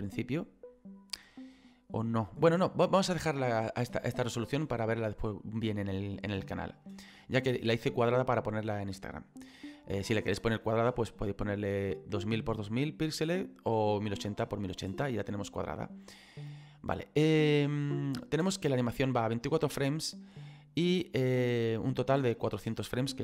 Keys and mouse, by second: 4.3 click, 22.7 middle click.